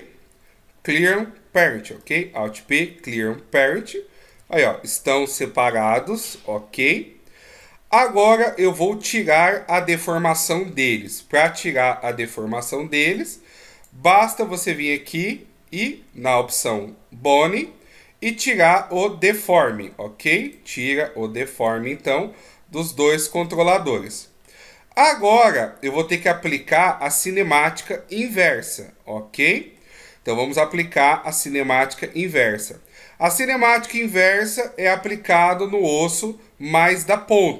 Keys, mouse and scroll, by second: 0.1 alt+p, 3.4 middle click, 4.7 g, 8.9 middle click, 11.3 right click, 13.5 click, 15.8 scroll down 2, 16.9 scroll down 3, 19.6 click, 19.6-20.2 scroll down 5, 20.8 right click, 21.9 right click, 23.2 click, 23.8 middle click, 25.2 scroll down 2, 25.7 middle click, 34.2 middle click.